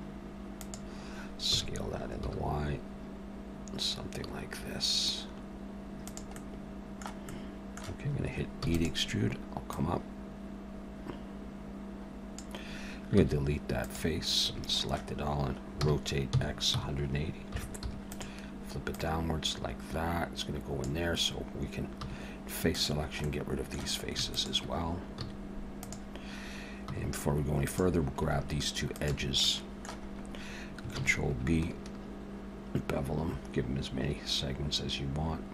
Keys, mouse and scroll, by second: 6.4 middle click, 7.3 middle click, 8.6 e, 9.7 click, 13.1 x, 14.4 a, 15.8 r, 18.9 click, 22.0 3, 22.7 click, 23.2 middle click, 24.3 shift+click, 25.2 x, 26.9 2, 27.7 click, 28.9 shift+click, 29.4 middle click, 30.1 scroll up 1, 30.9 ctrl+b.